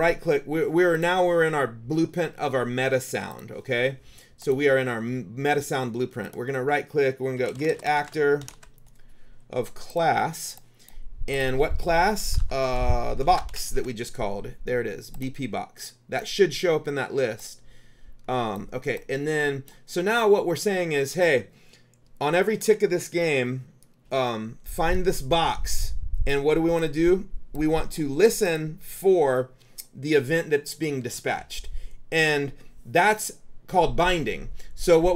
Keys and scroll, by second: 7.2-9.1 typing, 12.1-14.4 typing.